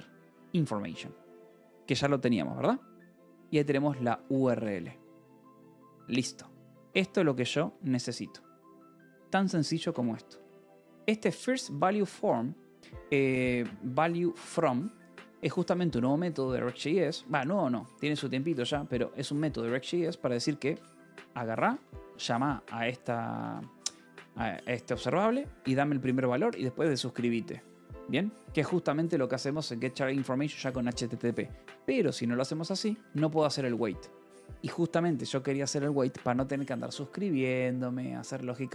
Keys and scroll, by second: 0.0 ctrl+n, 0.2 Return, 1.2 Escape, 2.9-5.1 typing, 3.4 Escape, 4.6 Escape, 6.3 ctrl+s, 6.4-12.6 typing, 10.4 Escape, 15.5 Escape, 16.3 g, 16.9 Escape, 17.7 h, 18.1 l, 18.9 shift+k, 19.8 Escape, 20.2-23.9 typing, 21.5 Escape, 29.0 Escape, 29.1 l, 30.5 Escape, 31.4-34.0 typing, 34.0 Escape.